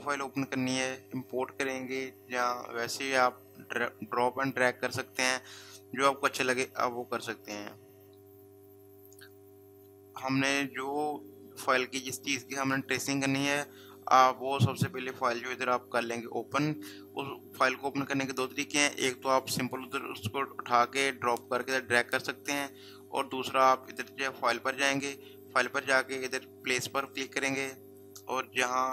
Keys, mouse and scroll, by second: 7.4 click, 24.6 click, 27.1 click.